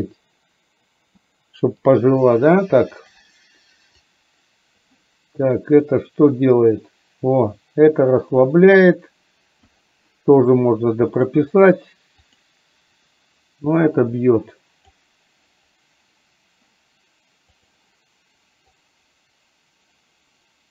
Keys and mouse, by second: 4.2 click, 6.1-9.8 drag, 12.4 click, 13.8-14.9 drag, 18.8-20.7 drag.